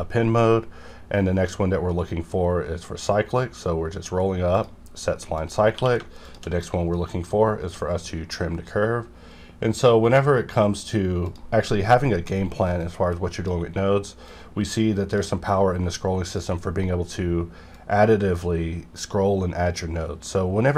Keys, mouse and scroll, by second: 1.0 scroll down 1, 1.6 scroll up 1, 2.3 scroll up 1, 3.0 scroll up 1, 4.5 click, 5.7 q, 6.1 shift+click, 6.7 scroll up 1, 7.2 scroll up 1, 7.3 scroll down 1, 7.5 scroll up 1, 8.1-8.6 scroll up 1, 8.6 scroll up 1, 9.3-9.7 scroll up 1, 10.1 scroll up 1, 10.7 scroll, 10.8-11.2 scroll down 1, 11.2 click, 11.9 middle click, 12.2 scroll down 1, 12.8-20.7 drag.